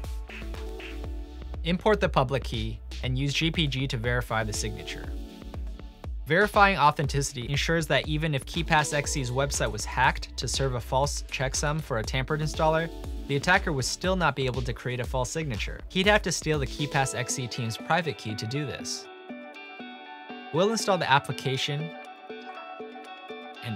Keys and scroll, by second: 0.4-2.8 typing, 4.2-8.0 typing, 8.2 Tab, 9.1-9.8 typing, 14.9 typing, 18.2 typing, 22.5 typing.